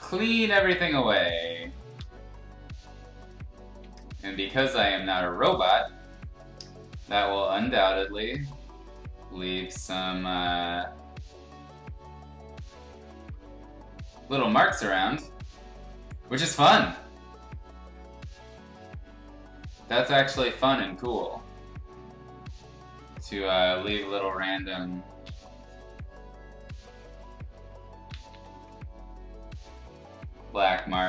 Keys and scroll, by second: 1.9 z, 3.8 x, 4.7 x, 8.0 ctrl+z, 14.6 ctrl+z, 25.2 ctrl+z, 28.1 ctrl+z, 28.3 ctrl+z.